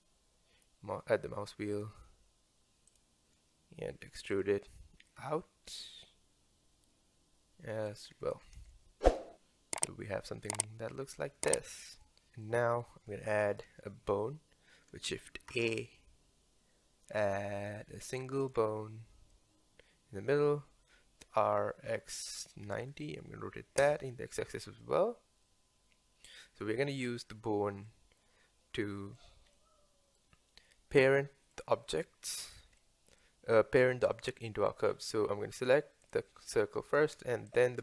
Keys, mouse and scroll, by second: 4.1 e, 5.2 s, 8.1 Tab, 8.4-8.7 scroll down 1, 8.7-15.4 middle drag, 15.5 shift+a, 19.3-21.5 middle drag, 21.5 r, 24.8-27.8 middle drag, 28.0-34.9 middle drag, 34.9-36.0 scroll up 1, 36.0 click, 36.6-37.5 middle drag, 37.5 shift+click.